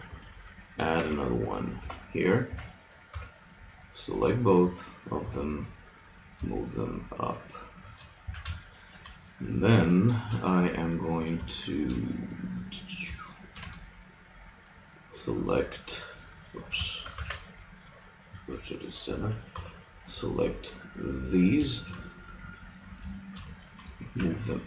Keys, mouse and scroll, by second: 0.9 ctrl+r, 2.5 a, 3.1 b, 5.2 g, 8.3 a, 8.5-11.8 middle drag, 17.2 shift+s, 19.5 b, 24.2 g.